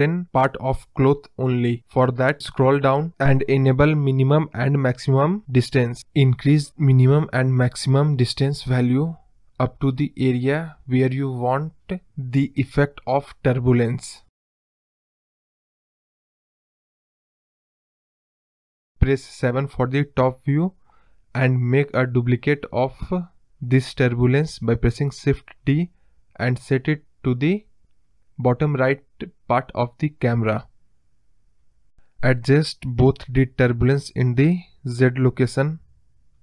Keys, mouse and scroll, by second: 1.7-2.8 scroll down 7, 2.8 click, 3.3 click, 4.1-5.5 drag, 5.5 middle click, 6.5-8.1 drag, 12.1 click, 12.9 scroll down 1, 13.0-14.7 middle drag, 14.7 click, 15.5 middle click, 16.1-17.1 drag, 18.3 scroll down 1, 18.5 middle drag, 18.8-19.5 scroll up 3, 19.8 KP_7, 20.4-22.0 scroll down 2, 23.3 shift+d, 26.8 KP_0, 28.1 g, 28.9 scroll down 2, 29.0-30.5 middle drag, 30.7 click, 32.5-34.1 drag, 35.8 scroll down 2, 35.9-36.4 middle drag.